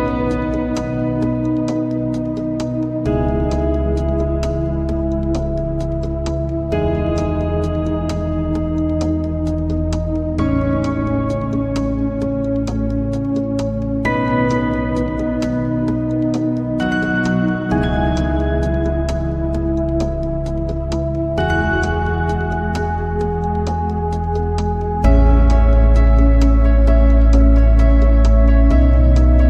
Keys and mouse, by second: 1.9 click, 3.3 click, 3.6 click, 5.4 click, 6.1 click, 8.6 shift+middle click, 11.5 alt+middle click, 13.3 click, 15.0 shift+middle click, 16.7 click, 17.6 click, 23.0 click, 23.8 click, 24.1 click, 26.0 shift+middle click, 28.2 click.